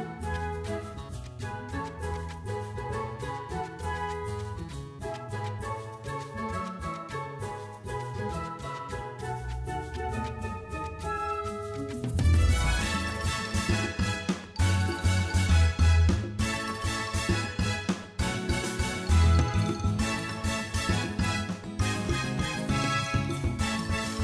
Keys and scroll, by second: 17.4 ., 17.6 5, 17.8 Return.